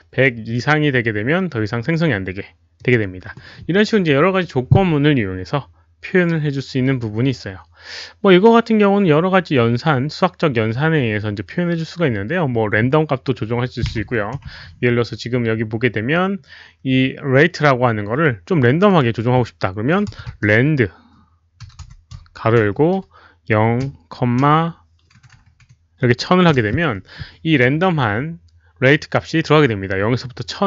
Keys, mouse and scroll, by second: 2.7 click, 15.8-16.1 scroll up 1, 16.3-16.6 scroll down 2, 18.9 click, 19.8-22.7 typing, 21.6 click, 23.8 0, 24.9-26.5 typing, 25.2 click, 26.0 click.